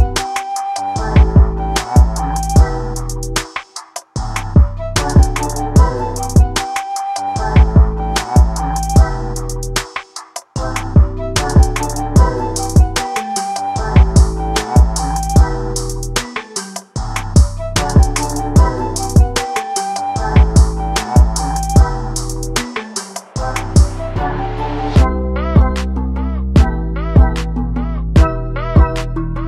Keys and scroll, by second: 26.1 Delete.